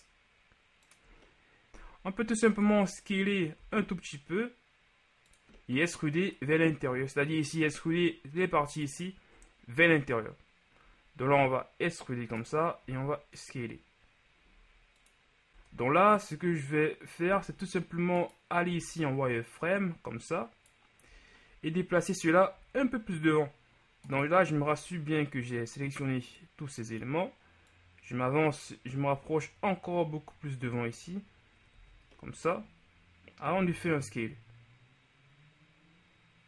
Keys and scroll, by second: 2.8 KP_1, 3.6 s, 11.3 e, 12.9 s, 15.6 Tab, 17.3 z, 18.7 b, 24.6 b, 31.9 z, 33.6 s.